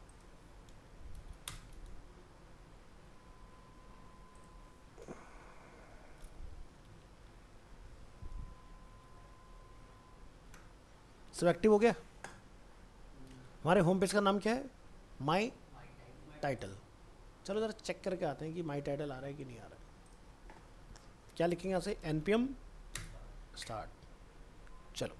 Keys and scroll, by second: 1.8 ctrl+v, 7.1 ctrl+x, 9.0 ctrl+v, 19.6 ctrl+s.